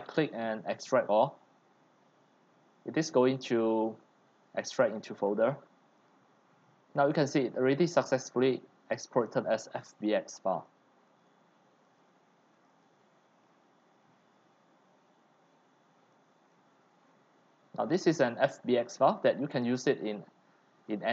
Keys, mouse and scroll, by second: 7.1 click, 7.4 click, 8.9 click, 10.3 click, 12.0 click, 12.7 click, 12.8 click, 15.9 click, 16.3 click, 16.6-17.0 drag, 17.1-18.2 middle drag, 17.1-17.8 scroll, 18.5-20.6 middle drag, 20.6 scroll, 20.8 right click.